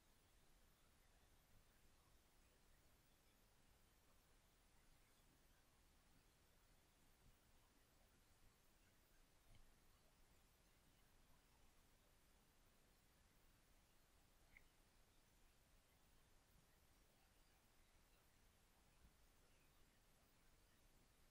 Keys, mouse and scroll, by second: 9.9 f, 10.8 f, 14.8 f.